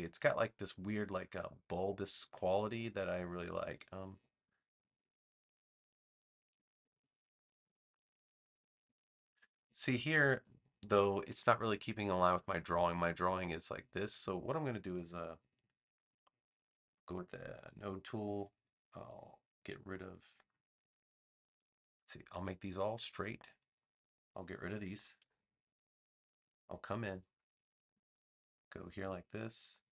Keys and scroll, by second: 17.0 a, 25.1 BackSpace, 26.3 v.